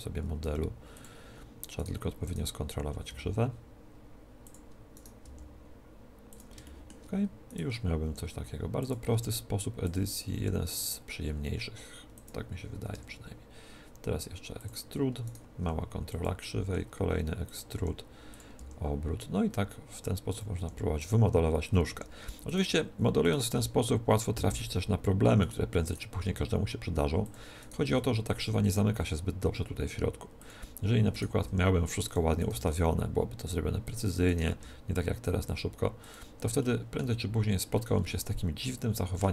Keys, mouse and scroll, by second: 0.3 g, 1.7-3.9 right drag, 3.0 g, 4.4-6.2 drag, 4.9-6.6 right drag, 5.1 g, 6.3-8.2 drag, 7.4-9.2 right drag, 7.9 r, 8.8-11.7 drag, 9.0 s, 10.3 r, 11.9 r, 12.3-14.0 drag, 12.9 e, 14.5-16.5 drag, 15.1-17.1 right drag, 16.5 e, 17.4 e, 17.5-20.1 drag, 17.7 r, 18.5 g, 20.3-24.2 drag, 20.5 r, 21.8 r, 23.1-24.2 right drag, 23.5 g, 24.2 middle click, 24.3 click, 24.4 middle click, 24.9 click, 25.3 middle click, 26.1-27.2 right drag, 26.1 g, 27.2-29.0 middle drag, 27.7 g, 29.0 click, 29.2 right click, 30.5-31.9 drag, 31.0 right click, 31.3 r, 32.5 g, 32.9 click, 32.9 right click, 33.3 click, 33.3 right click, 34.0 click, 34.5 g, 35.6 click, 35.8 right click, 36.0-37.7 drag, 36.5-39.3 middle drag, 36.9 z, 37.8 click.